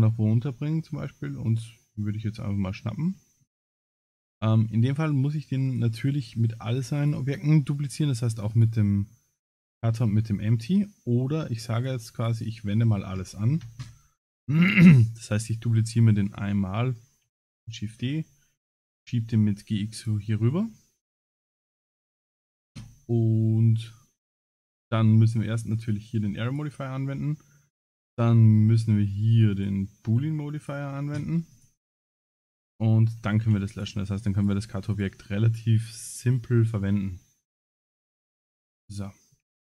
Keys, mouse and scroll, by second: 1.5 click, 2.4-3.1 scroll up 3, 3.2 shift+middle click, 3.6 scroll up 4, 4.9 g, 7.0 shift+click, 8.5 shift+click, 9.4 click, 9.9 g, 11.8 click, 12.2 click, 15.4 shift+click, 16.3 shift+click, 17.6 shift+d, 18.6 g, 20.7 shift+middle click, 21.9 click, 22.3 click, 24.6 click, 26.5 click, 29.5 click, 30.6 click, 32.7 shift+click, 33.4 x, 34.3 click, 34.9 click, 37.8-38.3 scroll down 6, 38.3 shift+middle click, 39.0 shift+middle click, 39.5 scroll down 4.